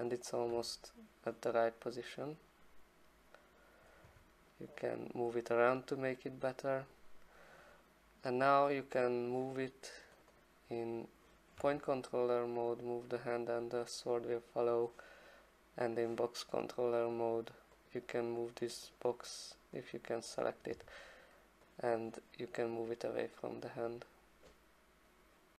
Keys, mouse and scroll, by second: 0.5 e, 3.8 click, 4.0 w, 5.3 click, 6.9 click, 9.1 click, 10.2 click, 10.5 click, 11.6 e, 14.8 click, 16.0 click, 17.1 click, 17.9 click, 18.5 click, 19.0 click, 19.9 click, 20.7 w, 22.6 click, 23.9 click.